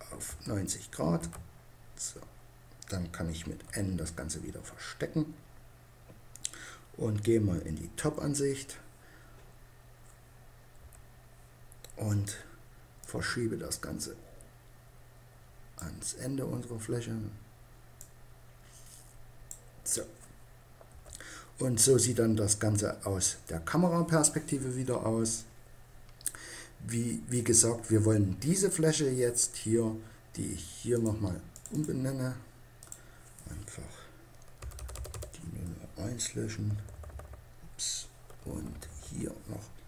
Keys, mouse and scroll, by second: 3.6 n, 5.1-6.8 drag, 7.9 KP_7, 10.8 KP_5, 13.0-14.8 middle drag, 17.4-19.7 drag, 20.8 KP_0, 24.0-30.1 middle drag, 30.9-33.5 drag.